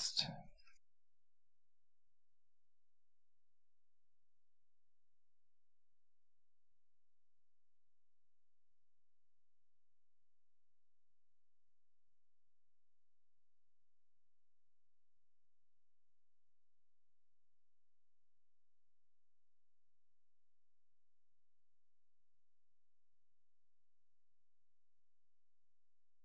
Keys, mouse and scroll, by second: 0.0 Right, 0.5 Right, 0.8 Right, 1.0 Right, 1.4 Right, 1.6 Right, 1.8 Right, 2.1 Right, 2.3 Right, 2.5 Right, 2.8 Right, 3.1 Right, 3.4 Right, 3.9 Right, 4.4 Right, 4.8 Right, 5.0 Right, 5.3 Right, 5.6 Right, 5.9 Right, 6.2 Right, 6.5 Right, 6.8 Right, 7.1 Right, 7.4 Right, 7.7 Right, 8.0 Right, 8.3 Right, 8.5 Right, 8.8 Right, 9.3 Right, 9.5 Right, 9.9 Right, 10.2 Right, 10.5 Right, 10.8 Right, 11.1 Right, 11.3 Right, 11.6 Right, 11.8 Right, 12.1 Right, 12.3 Right.